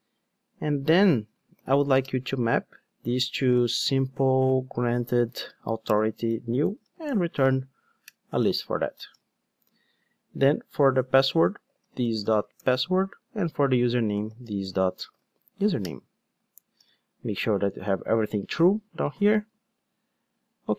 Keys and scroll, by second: 2.0 Return, 9.1 alt+super+l, 12.6 Return, 16.7 alt+super+l.